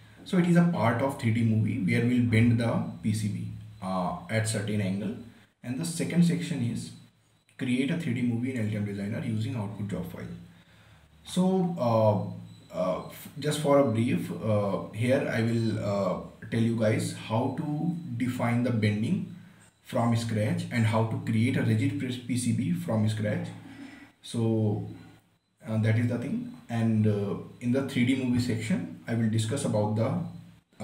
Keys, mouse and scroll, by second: 5.6 scroll down 1, 11.3 scroll up 1, 15.7 scroll down 1, 17.4 scroll up 1, 24.7 scroll down 1.